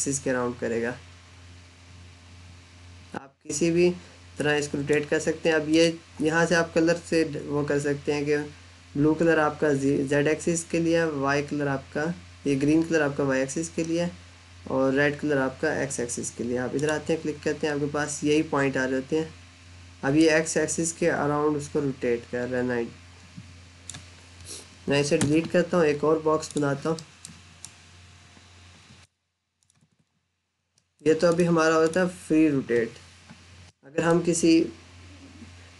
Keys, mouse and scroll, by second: 16.6 click, 20.0 click, 25.0 Delete, 26.2 click, 26.8 middle click, 27.5 click, 29.6 Escape, 30.6 middle click, 31.1 click, 33.5 middle click.